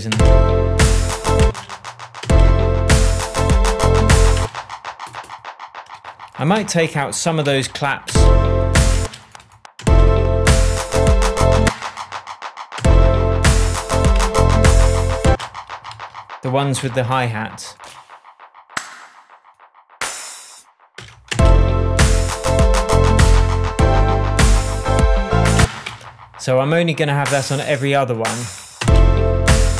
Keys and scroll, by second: 0.1 space, 1.4 space, 4.3 space, 6.5 BackSpace, 7.4 p, 8.0 space, 11.6 space, 12.7 space, 14.1 BackSpace, 15.2 space, 15.8 super+space, 15.9 super+z, 16.7 super+p, 20.9 BackSpace, 21.3 space, 25.5 space, 25.8 BackSpace, 27.6 BackSpace, 28.8 space.